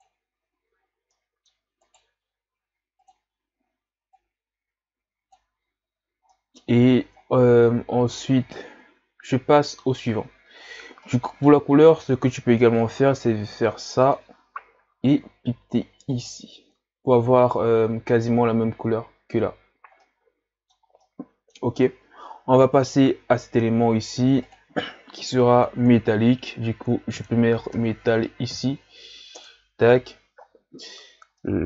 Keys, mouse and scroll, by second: 0.6 a, 0.8-1.1 scroll down 4, 1.1 middle click, 1.9 right click, 4.2 click, 5.0-6.4 drag, 6.4-7.1 middle drag, 7.1 scroll down 3, 7.2-7.9 scroll up 3, 7.9-8.6 scroll up 3, 8.6-16.2 middle drag, 17.5-19.0 middle drag, 19.0-20.1 scroll down 2, 19.3-21.9 middle drag, 21.9-22.5 scroll up 1, 22.8 right click, 24.7-29.5 drag.